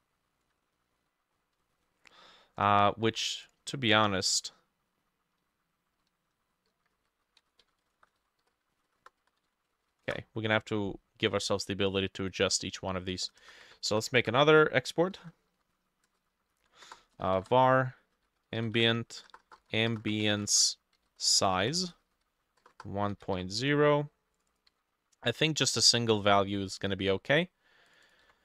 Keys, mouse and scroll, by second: 0.7 alt+click, 0.7 scroll down 1, 0.8 middle click, 1.4 scroll down 3, 1.7 middle click, 1.9 scroll up 2, 3.0 ctrl+middle click, 3.1 ctrl+z, 3.5 double click, 6.7-9.9 typing, 7.5-9.5 drag, 8.0 shift+middle click, 9.7 ctrl+middle click, 10.1 ctrl+c, 13.5 Return, 13.9 BackSpace, 14.2 Return, 14.2-18.8 drag, 14.7 shift+middle click, 15.4-23.9 typing, 21.6-28.4 drag, 24.6 ctrl+middle click, 24.7 ctrl+c, 28.2 ctrl+middle click, 28.3 ctrl+c.